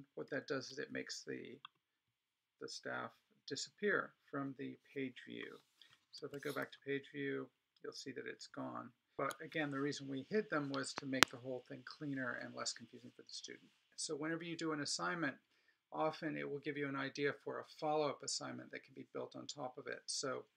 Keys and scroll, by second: 0.4 alt+super+-, 6.2 super+e.